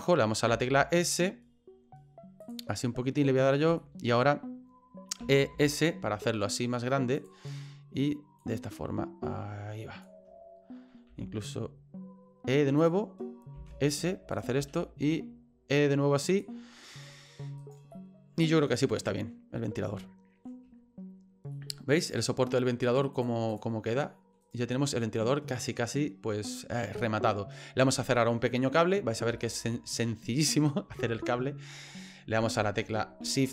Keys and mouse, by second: 0.5 s, 2.8 middle click, 3.4 middle click, 3.9 shift+middle click, 5.2 e, 8.4-10.0 drag, 11.1 e, 13.5 s, 14.6 e, 17.0 middle click, 17.6 right click, 17.9 middle click, 19.0 middle click, 19.9 middle click, 21.5 middle click, 22.0 right click, 23.2 click, 24.0 middle click, 24.4 right click, 24.7-27.8 middle drag, 28.5 middle click, 29.4 shift+middle click, 30.9 shift+middle click.